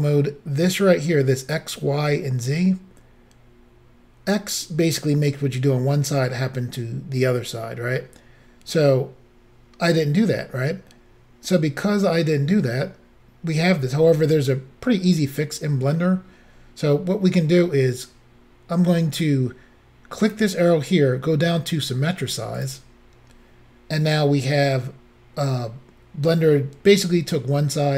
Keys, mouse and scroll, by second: 20.3 click, 22.7 click.